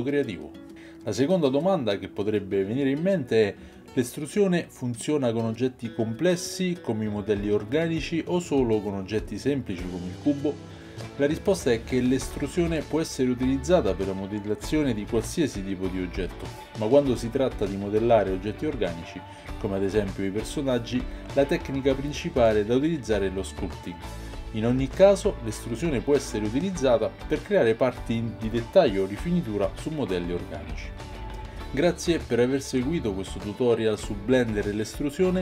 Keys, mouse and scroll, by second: 34.5 click, 34.5 middle click, 34.5 right click, 35.3 click, 35.3 middle click, 35.3 right click.